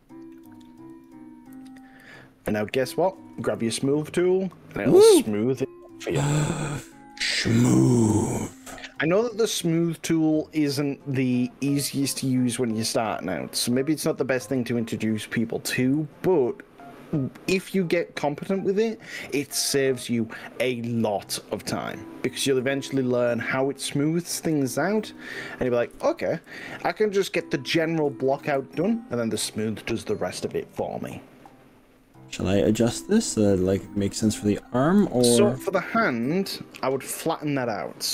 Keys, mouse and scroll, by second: 0.4 right click, 1.0 click, 1.5-2.8 middle drag, 6.3 middle click, 7.4-7.9 middle drag, 8.1-9.2 drag, 10.4-12.0 middle drag, 12.6 click, 16.1-21.7 middle drag, 22.0 click, 22.6 click, 23.3 middle click, 23.6-25.3 middle drag, 25.6 middle click, 25.9 KP_1, 26.6 g, 28.1 click, 28.6 ctrl+z, 29.6 click, 30.6 g, 35.0 click, 36.2 click.